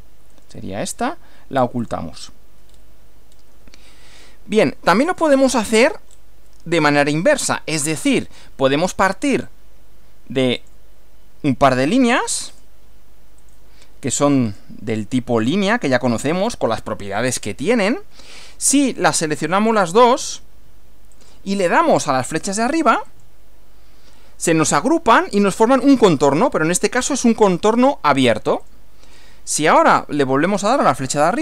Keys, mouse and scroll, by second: 0.3 right click, 1.8 click, 2.7 scroll down 2, 3.3 scroll down 2, 4.2-5.4 shift+middle drag, 5.4 shift+scroll up 2, 5.5 shift+scroll down 2, 5.6-6.3 shift+scroll up 5, 6.5-7.4 shift+middle drag, 7.5 shift+scroll up 2, 9.0 click, 10.6 click, 12.0 click, 12.5 click, 13.4 click, 14.5 click, 16.1 click, 17.4 scroll down 2, 19.8 click, 21.2 ctrl+click, 23.1 click, 28.6 click, 31.2 click.